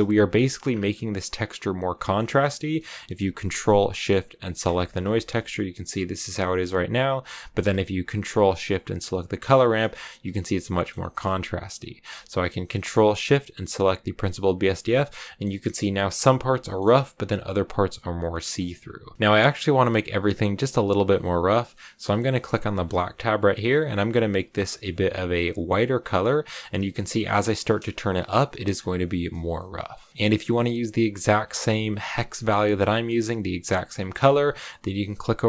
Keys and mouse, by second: 0.2 shift+middle click, 1.9 click, 2.5 click, 4.5 ctrl+shift+click, 5.3 shift+click, 6.3 shift+middle click, 7.3 middle click, 9.2 ctrl+shift+click, 10.6 click, 14.8 shift+click, 16.5 shift+middle click, 18.2 click, 22.7 click, 24.4 click.